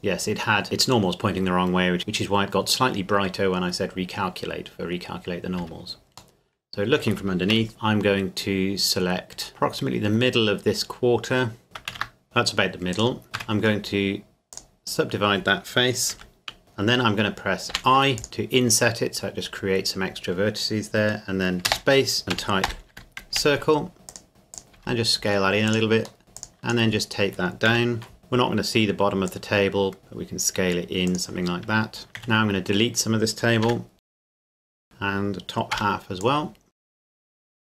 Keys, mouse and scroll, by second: 5.6 Tab, 6.4 middle click, 7.5 ctrl+KP_7, 7.7 click, 9.5 right click, 11.6 click, 11.9 ctrl+z, 12.9 right click, 13.4 w, 14.5 click, 16.2 KP_Decimal, 16.6 ctrl+z, 17.7 i, 19.8 click, 21.6-23.3 typing, 24.1 click, 24.8 s, 25.7 click, 26.2 e, 26.4 click, 26.9-27.7 scroll down 1, 27.7 KP_1, 28.2 scroll down 1, 29.3 click, 30.0 s, 31.1 click, 31.8 scroll up 1, 32.1 z, 32.2 a, 32.8-33.6 scroll up 1, 33.6 b, 34.0 click, 34.4 ctrl+KP_Add, 34.5 click, 34.6 x, 34.8 click, 35.7 b, 36.2 click, 36.8 x, 36.9 click, 37.0 z, 37.1 middle click, 37.2 shift+middle click, 37.3 scroll up 2, 37.4 scroll down 2.